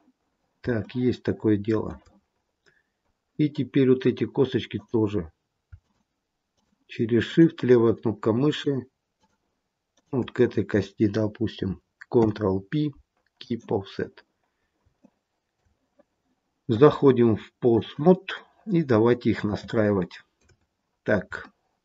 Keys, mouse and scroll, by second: 0.1-0.7 scroll down 3, 0.7 shift+middle click, 2.2-2.8 scroll up 4, 2.8-3.2 scroll down 1, 4.6 click, 5.7 shift+click, 6.4 click, 8.4 shift+click, 9.1 shift+click, 9.8 shift+click, 12.1 ctrl+p, 14.1-14.8 scroll down 5, 14.9 shift+middle click, 16.6 click, 18.3 middle click, 19.6 shift+middle click, 20.5-21.1 scroll up 4, 21.4 shift+middle click.